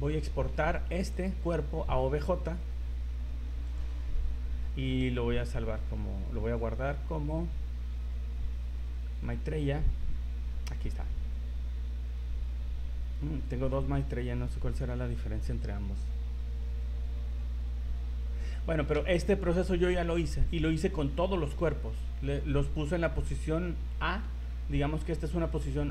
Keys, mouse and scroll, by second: 0.1 scroll down 3, 1.1 click, 24.3 Escape.